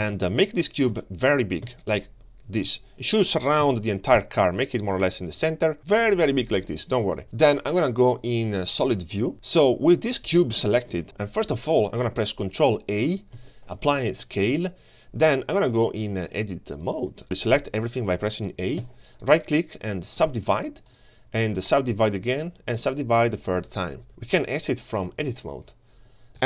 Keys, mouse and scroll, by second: 0.1 ctrl+space, 0.5-0.9 scroll down 2, 0.9 s, 1.7 s, 2.6 KP_1, 3.6 g, 5.0 g, 6.0-6.4 middle drag, 8.4 click, 9.0-9.3 scroll down 3, 9.3 middle click, 9.5-10.2 scroll up 4, 10.4 shift+middle drag, 11.0 ctrl+space, 11.0 click, 13.4 ctrl+a, 16.0 click, 17.2 right click, 18.8 a, 19.2 right click, 20.9 right click, 22.3 right click, 25.0-25.8 drag, 26.3 click.